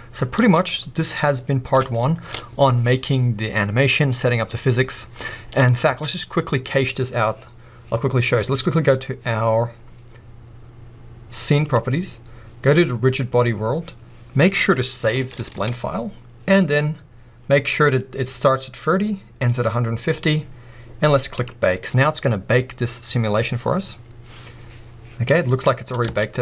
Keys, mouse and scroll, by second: 0.0-2.3 drag, 0.1 middle click, 1.4 scroll down 2, 6.0 space, 11.7-13.6 drag, 13.6-14.3 scroll down 1, 15.3 ctrl+s, 17.6-19.6 scroll down 1, 21.3-26.4 drag, 25.6-26.1 scroll down 2, 26.1 space, 26.3 scroll up 2.